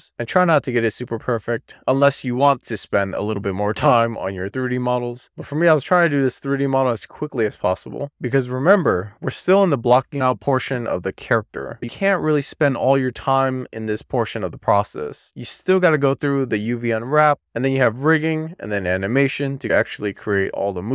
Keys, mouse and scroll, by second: 10.3 click, 15.1 ctrl+a.